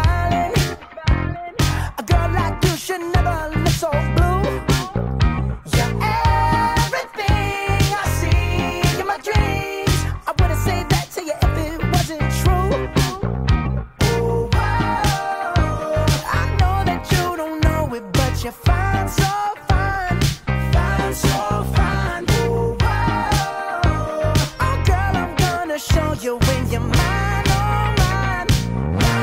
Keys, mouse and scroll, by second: 0.8 g, 8.7 g, 12.5 a, 14.5-23.2 drag.